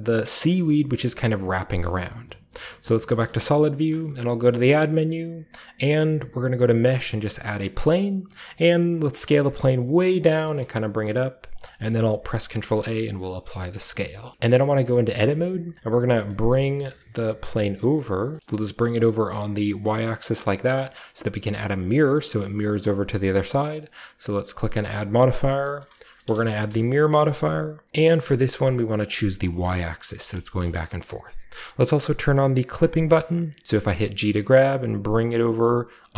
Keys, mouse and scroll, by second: 0.3-3.1 middle drag, 1.5-2.5 scroll down 1, 2.5-3.1 scroll down 1, 2.5 z, 3.3-6.1 shift+middle drag, 3.3-5.9 shift+scroll up 1, 3.9 typing, 5.9 shift+scroll up 1, 7.2-7.8 drag, 7.8-8.5 scroll down 1, 8.5 click, 9.0 click, 9.0 typing, 9.2-10.2 scroll up 1, 10.2 click, 10.2-10.6 typing, 11.5 click, 11.7 middle drag, 11.9-13.1 scroll up 1, 12.0-12.8 typing, 13.1-13.5 ctrl+drag, 13.1 ctrl+scroll up 1, 13.6 shift+scroll up 1, 13.7-14.3 shift+middle drag, 13.7-14.3 shift+scroll down 1, 14.5 middle click, 14.8 Tab, 15.9 g, 16.3-18.2 middle drag, 18.3 click, 18.4 alt+Left, 18.4 g, 18.4-19.9 alt+middle drag, 19.9 click, 20.5-21.8 shift+middle drag, 22.0-24.0 middle drag, 24.5-26.2 drag, 26.2 Return, 26.2 typing, 28.2-32.3 middle drag, 29.1 click, 29.4 click, 30.6-31.4 shift+scroll up 1, 31.4-32.3 shift+scroll up 1, 32.7 click, 33.0-34.8 shift+middle drag, 33.6-34.1 scroll up 1, 34.1-34.8 scroll up 1, 35.3-36.1 middle drag.